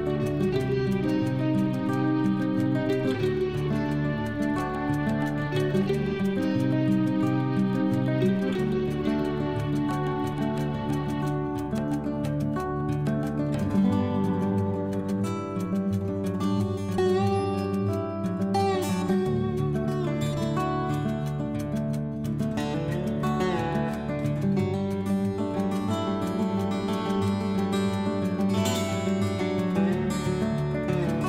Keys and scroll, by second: 5.6 ctrl+Home.